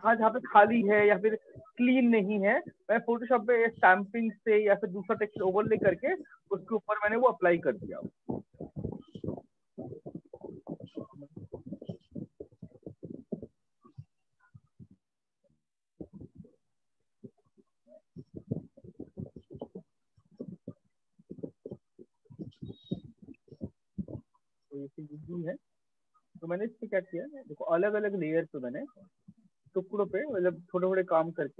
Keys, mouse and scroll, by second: 7.4-12.5 drag, 23.8 click, 24.6 ctrl+space, 25.1 ctrl+space, 25.1 ctrl+click, 25.3 ctrl+space, 25.3 ctrl+click, 25.5 ctrl+click, 25.7-26.5 ctrl+space, 26.5 click, 27.5 click, 29.2 click, 31.1 click.